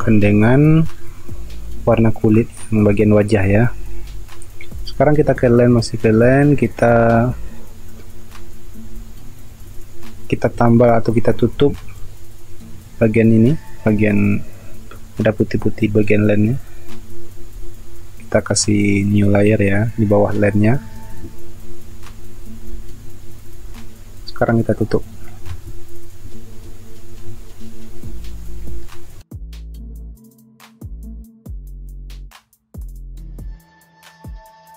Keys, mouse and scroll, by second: 0.0 space, 11.4 space, 22.7-23.3 typing, 24.7 typing, 28.3 space, 30.2 space, 31.9-32.7 typing, 34.4 ctrl+alt+z, 34.6 space.